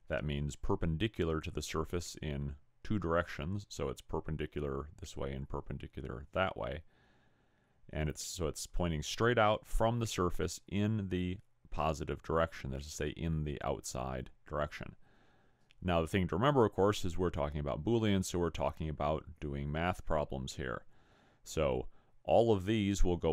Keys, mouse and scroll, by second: 17.9-18.3 scroll up 3, 21.0-21.4 scroll down 2.